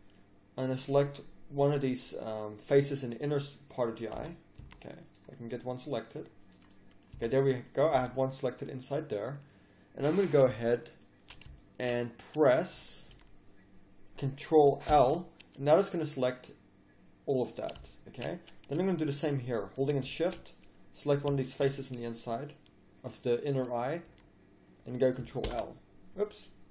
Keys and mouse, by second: 0.7 middle click, 4.2 z, 4.6 z, 7.2 z, 8.0 z, 12.7 z, 13.1 z, 14.9 ctrl+l, 21.5-23.2 middle drag, 23.3 middle click, 24.0 z.